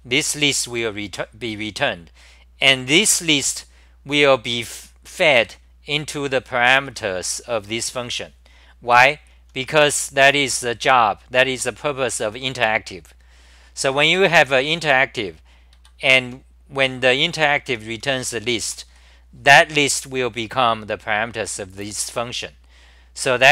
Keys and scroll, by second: 0.0-1.2 typing, 5.7 ctrl+g, 5.7-8.0 typing, 9.2 ctrl+g, 9.2-11.0 typing, 14.2-15.1 typing, 15.7 ctrl+g, 16.2-19.4 typing.